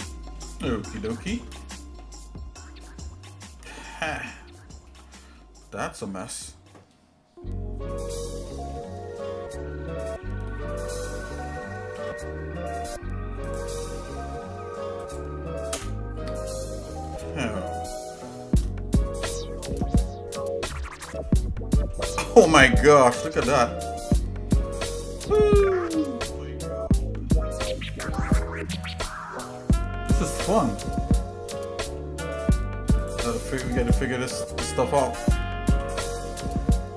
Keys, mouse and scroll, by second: 0.5 middle click, 1.0 shift+middle click, 1.6 middle click, 2.2 scroll down 2, 2.8 shift+middle click, 3.6-4.3 scroll up 3, 4.8 shift+middle click, 8.7 middle click, 12.0 k, 15.9 \, 17.6 shift+middle click, 18.8 scroll down 1, 19.2 shift+middle click, 19.9 scroll down 1, 20.3 middle click, 21.1 shift+middle click, 23.1 middle click, 23.9 shift+middle click, 25.8 middle click, 26.6 shift+middle click, 27.8 click, 28.8 click, 29.3-30.4 middle drag, 31.1 scroll up 1, 31.6 middle click, 32.9 click, 33.0 shift+middle click, 33.9 click, 34.6 click, 35.7 g.